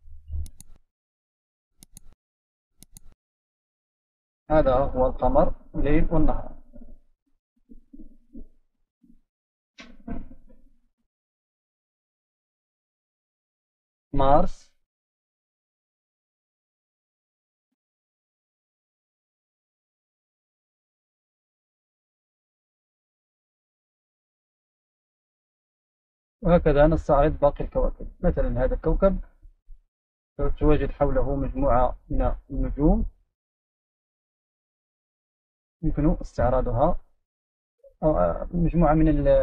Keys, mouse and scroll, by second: 5.7 right click, 6.0-7.2 scroll down 3, 8.6 click, 9.3 click, 12.5 right click, 13.7 click, 14.5 click, 19.4 click, 21.4 right click, 22.3 click, 27.4-28.9 scroll down 3, 28.9 click, 30.0-30.9 scroll up 2, 30.9 right click, 33.6 click, 34.7 right click, 36.1 click, 36.9 drag.